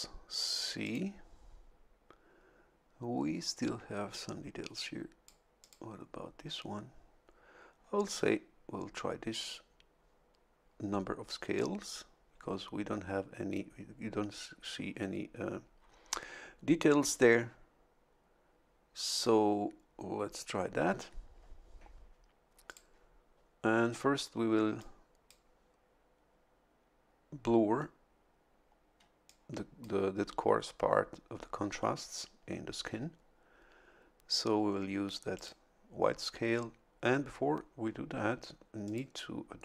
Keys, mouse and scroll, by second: 0.8 click, 4.7 click, 5.6 click, 22.6 click, 24.8-25.8 drag, 29.2 click, 35.3 click, 38.8 click.